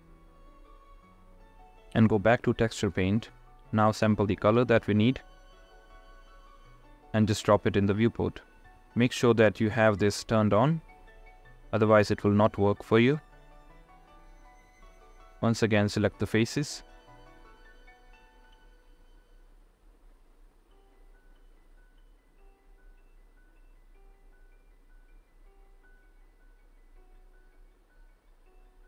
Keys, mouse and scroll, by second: 21.8-28.8 middle drag.